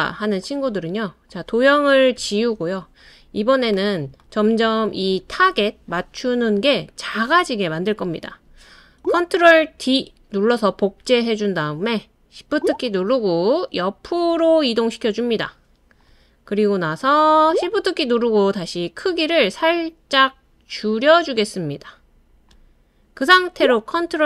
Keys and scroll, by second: 2.1 BackSpace, 9.7 super+d.